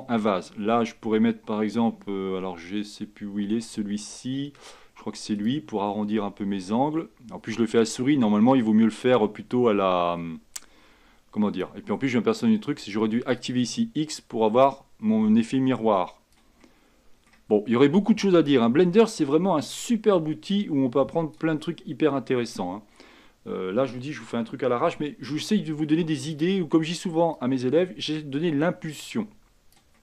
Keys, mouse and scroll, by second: 16.7 middle click, 17.4-18.6 scroll up 1, 18.6-21.8 drag, 21.8-25.1 middle drag, 25.1 f, 27.5-30.0 drag.